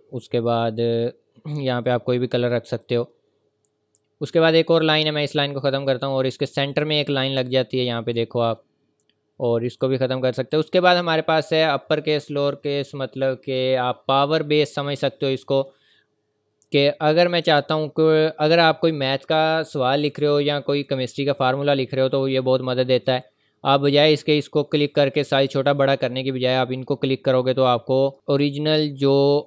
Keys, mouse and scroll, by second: 2.7 click, 7.4-7.9 scroll up 1, 9.7 click, 16.7 click.